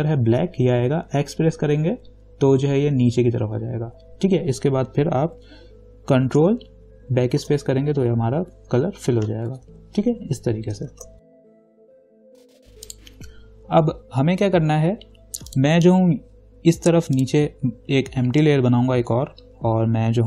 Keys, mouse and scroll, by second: 2.7 x, 9.7 ctrl+d, 11.1 ctrl+-, 11.2 space, 11.3 click, 11.6 click, 12.3 ctrl+d, 12.4 ctrl+0, 13.1 click, 15.7 click.